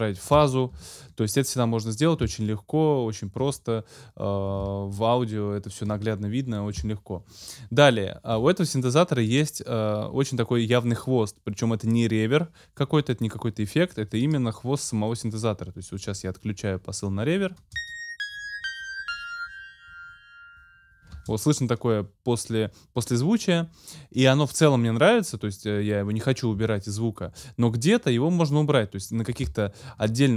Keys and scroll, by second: 0.7 super+z, 17.6 space, 21.1 space.